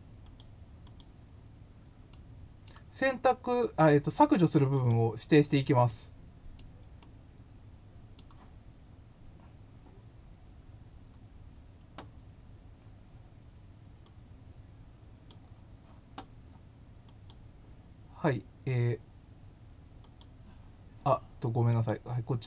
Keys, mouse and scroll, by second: 0.2 click, 0.8 click, 2.1 middle click, 4.7 click, 5.8-6.5 middle drag, 6.9-8.1 middle drag, 10.7 scroll down 1, 11.0 scroll up 1, 13.9-15.2 drag, 17.0 click, 20.0 click, 21.7 click.